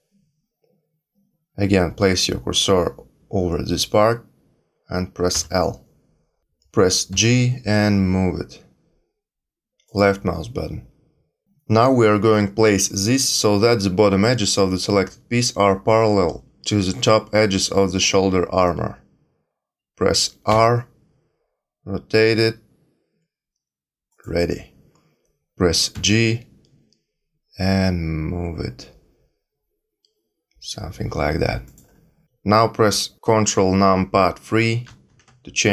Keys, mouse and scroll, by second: 5.3 l, 7.1 g, 20.5 r, 25.9 g, 34.8 ctrl+KP_3.